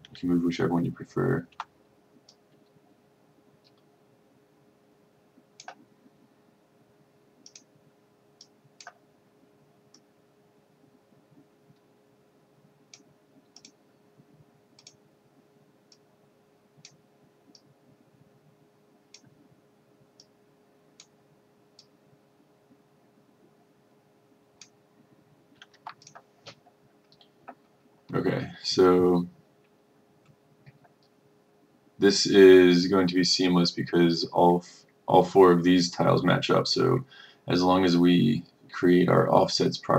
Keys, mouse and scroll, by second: 1.6 F2, 2.4-25.4 drag, 25.8 F1, 26.2 click.